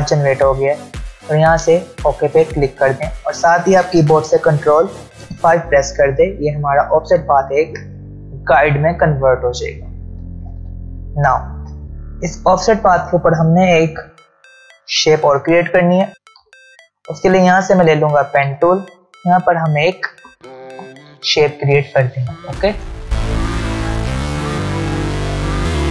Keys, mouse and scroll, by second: 2.6 click, 7.3 ctrl+alt+scroll up 2, 10.8-12.3 ctrl+scroll down 2, 16.4 v, 17.5 ctrl+alt+scroll up 1, 18.7 ctrl+alt+scroll down 1, 19.2 space, 20.4 alt+scroll down 1, 21.1 space, 21.4 click, 21.7-22.0 space, 22.4 alt+scroll down 1, 23.3 click, 23.4 shift+click, 24.5 v, 25.1 scroll up 1, 25.2 click.